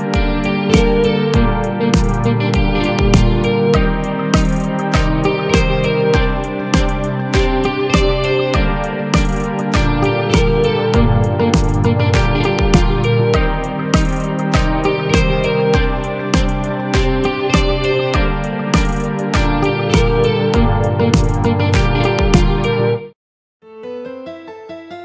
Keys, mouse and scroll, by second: 1.0 ctrl+3, 1.6 right click, 2.3 scroll up 2, 3.1 Tab, 3.8 Tab, 4.5 click, 4.9 Tab, 5.3 a, 5.8 alt+s, 8.1-10.3 middle drag, 10.3 a, 10.6 a, 11.1 click, 11.8 middle click, 12.4 shift+click, 13.0-14.0 shift+middle drag, 14.0 shift+click, 14.3-15.9 middle drag, 15.9 shift+click, 16.3 middle click, 17.1 g, 18.8 KP_1, 19.1 KP_3, 19.9 g, 23.2 a, 23.3-23.6 scroll down 1, 23.6 middle click, 24.2-24.5 scroll up 1, 24.5 shift+middle click, 24.8-25.0 scroll up 4.